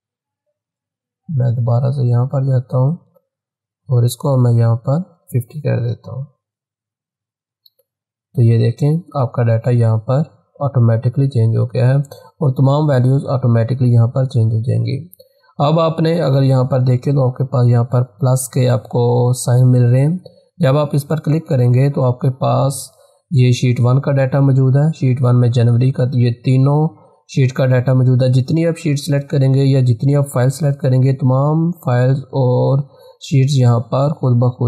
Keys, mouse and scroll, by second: 0.7 click, 5.2-5.8 typing, 7.5 click, 20.2 click.